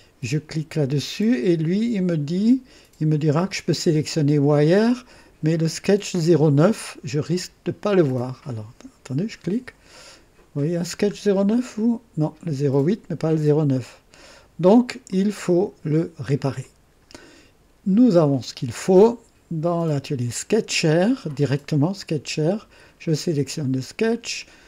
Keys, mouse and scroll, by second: 9.4 click, 10.6-11.1 scroll down 2, 15.0 click, 16.6 click, 18.3 click, 19.9 click.